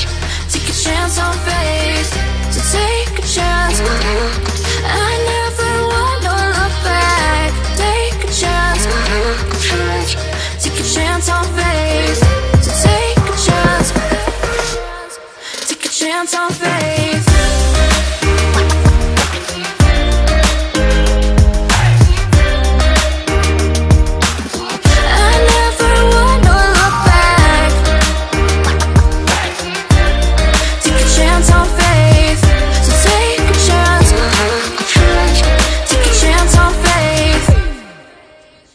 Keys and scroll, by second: 8.1 ctrl+c, 10.3 ctrl+v, 12.9 ctrl+t.